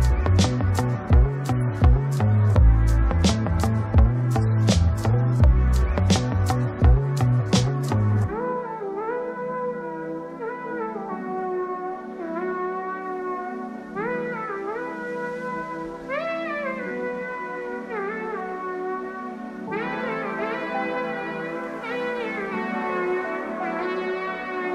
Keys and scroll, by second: 3.5 ctrl+;, 3.9 ctrl+space, 14.3 ctrl+g.